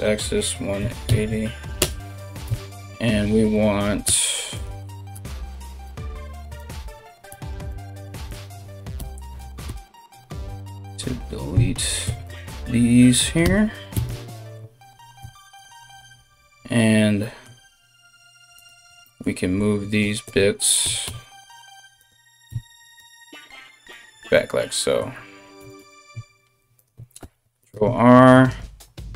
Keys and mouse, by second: 2.0 KP_1, 3.6 r, 4.7 g, 6.2 alt+right click, 6.9 x, 7.9 right click, 8.5 l, 9.2 x, 10.5 alt+right click, 11.2 c, 11.6 x, 13.0 l, 13.5 x, 14.8 x, 18.1 alt+right click, 19.6 alt+shift+right click, 20.4 g, 22.1 e, 25.2 g, 26.8 ctrl+r, 28.7 ctrl+shift+space, 28.8 ctrl+shift+click.